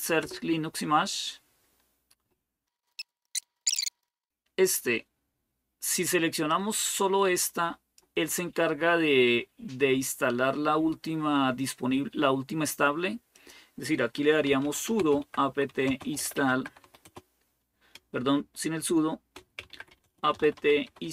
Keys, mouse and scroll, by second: 0.0 Return, 2.7-3.5 scroll up 1, 3.5-6.3 scroll down 1, 6.3-8.7 drag, 13.1-14.3 drag, 14.1-21.1 typing.